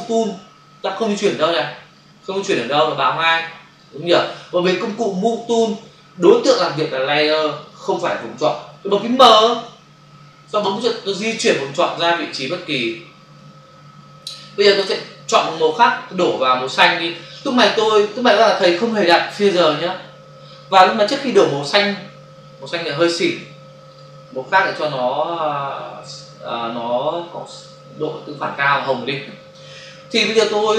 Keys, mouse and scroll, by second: 1.9 click, 3.8 click, 9.7 m, 11.4 click, 14.8 click, 16.2 click, 23.8 click, 25.2 click, 28.4 click.